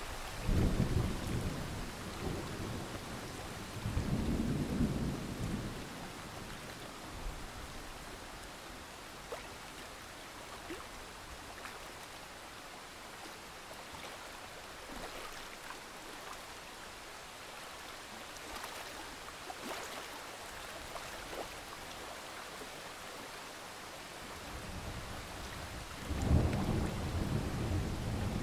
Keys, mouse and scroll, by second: 0.0 right click, 0.5 click, 1.5-1.8 alt+scroll up 1, 1.8 click, 2.8 alt+scroll down 1, 3.0 click, 3.2 alt+scroll up 1, 4.3-5.0 alt+scroll up 1, 5.0 click, 5.3 ctrl+z, 5.6-6.3 scroll down 1, 6.6 shift+click, 6.9-7.9 scroll down 1, 7.9 click, 8.1-8.5 alt+scroll up 1, 8.5 click, 9.0-10.2 alt+scroll down 1, 10.2 click, 10.7 alt+scroll down 1, 11.0 click, 11.1-12.3 scroll up 3, 12.3-12.8 scroll down 1, 13.9 click, 14.1-14.5 scroll up 1, 15.9-16.4 scroll down 1, 16.4 alt+scroll up 1, 17.0 click, 18.1 alt+scroll up 1, 19.5-28.4 drag.